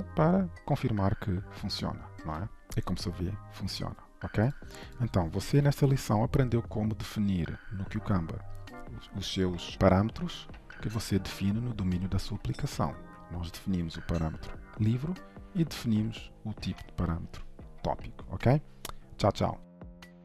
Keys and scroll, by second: 5.8 ctrl+shift+F12.